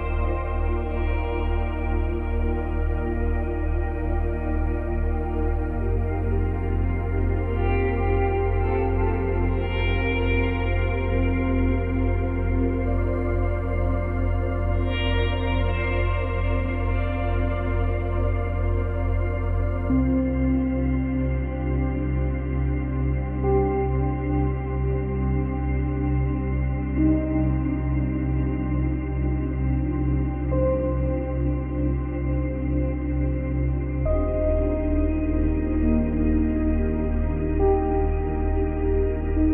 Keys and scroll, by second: 16.0 ctrl+c, 16.3 ctrl+v, 22.8 ctrl+z, 29.2 space, 30.3 space, 33.3 space, 36.2 space.